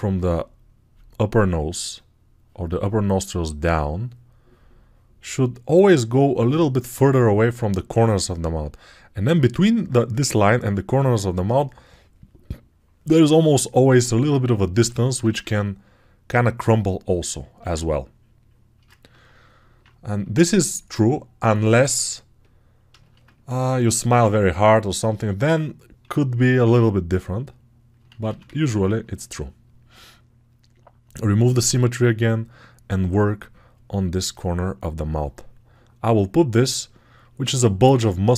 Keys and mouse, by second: 20.7 alt+right click, 23.0 ctrl+alt+click, 23.2 ctrl+right click, 23.3 ctrl+alt+click, 23.4 alt+right click, 24.2-30.9 drag, 25.9 2, 27.9 ctrl+z, 28.1 ctrl+z, 30.9-31.9 alt+middle drag, 31.9-38.3 drag.